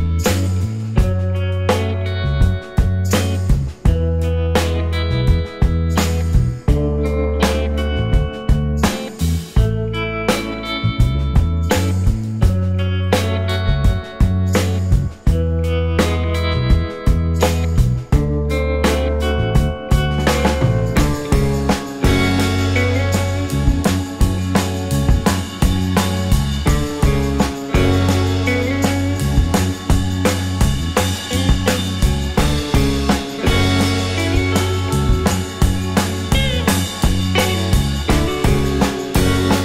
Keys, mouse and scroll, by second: 2.9 typing, 5.9 alt+middle click, 6.2 alt+scroll up 2, 6.5 scroll down 1, 6.5-7.5 scroll up 1, 7.5 typing, 10.5 typing, 14.7 typing, 14.8 alt+click, 19.2 alt+click, 19.3 alt+scroll up 1, 20.4 right click, 25.2-25.8 scroll down 1, 25.8 scroll up 1, 25.9-26.5 scroll down 1, 26.6 alt+click, 27.1 scroll down 1, 27.4 alt+click, 30.1-31.0 scroll up 6, 30.7 alt+middle click, 32.8 right click, 38.8 double click, 39.1 right click.